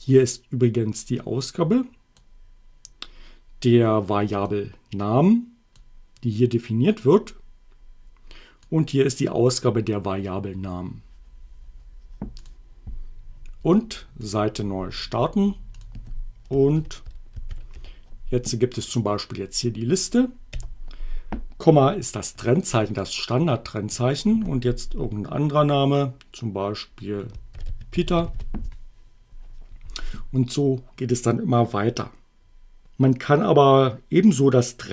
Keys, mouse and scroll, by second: 0.9-2.4 drag, 4.5-5.9 drag, 8.7-9.8 drag, 12.4 click, 14.2 click, 15.8 click, 16.7-18.2 typing, 20.3 ,, 27.3-28.8 typing.